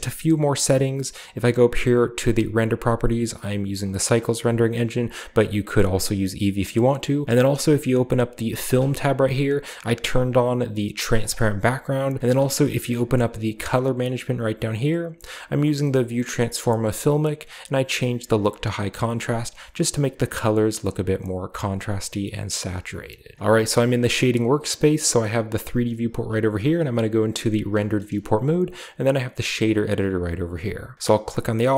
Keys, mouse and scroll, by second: 1.1 click, 3.6 click, 8.5 click, 11.0 click, 12.2-13.1 drag, 12.4-14.1 scroll down 1, 20.5-21.3 drag, 21.6-23.4 drag, 26.1 z, 27.7-28.8 shift+middle drag, 27.9-28.8 shift+scroll up 2, 28.8-30.9 scroll up 1, 30.9-31.7 right drag.